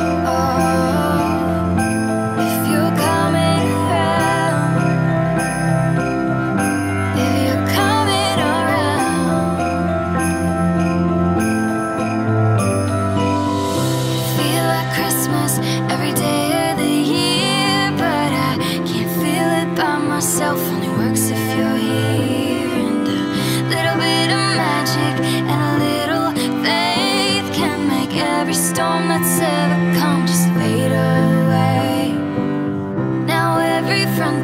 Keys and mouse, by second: 1.1 KP_0, 1.7 alt+middle click, 3.2 click, 3.8 alt+middle click, 5.2 click, 5.7 g, 5.9 z, 8.5 click, 9.1 KP_0, 10.3 alt+middle click, 11.0 click, 12.3 click, 13.7 click, 15.2 alt+middle click, 17.0 click, 17.5 r, 17.9 x, 18.2 z, 20.5 alt+middle click, 21.6 shift+middle click, 22.1 alt+middle click, 22.5 shift+middle click, 23.4 click, 26.1 s, 27.6 click, 27.9 g, 28.1 z, 30.6 alt+middle click, 32.9 click, 34.3 shift+a.